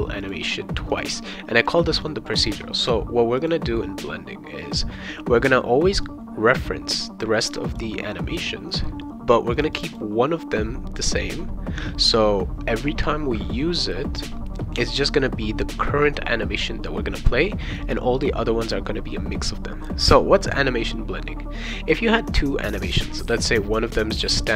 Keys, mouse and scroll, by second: 0.2 click, 0.9 click, 2.0 click, 2.8 click, 3.4 click, 6.0-7.2 drag, 7.7 click, 9.5 click, 9.7 click.